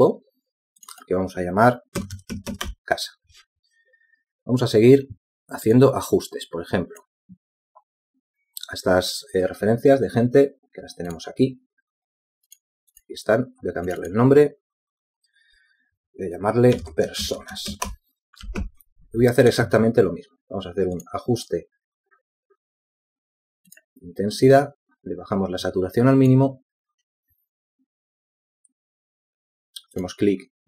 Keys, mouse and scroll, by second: 1.2 ctrl+g, 4.3-4.8 typing, 5.0 Return, 19.2-20.1 typing, 20.2 Return.